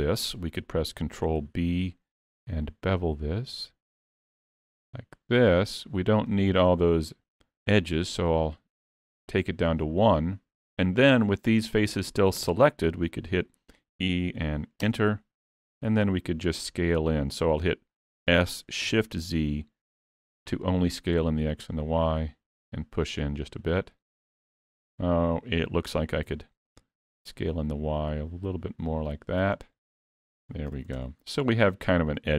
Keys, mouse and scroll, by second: 1.4 ctrl+b, 7.9 click, 14.0 e, 23.4 middle click, 26.3 s, 30.9 alt+a, 31.0 Tab, 31.2-31.5 scroll down 3, 31.5 middle click.